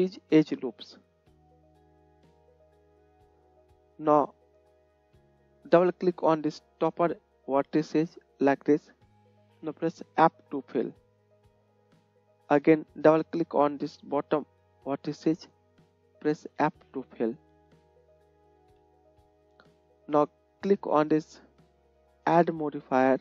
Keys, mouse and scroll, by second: 1.6 click, 1.6 middle click, 2.8-20.3 drag, 2.8-8.6 middle drag, 8.8 middle click, 8.8 right click, 10.9 f, 14.8 middle click, 14.8 right click, 16.8 f, 18.1 Tab, 18.7 KP_1.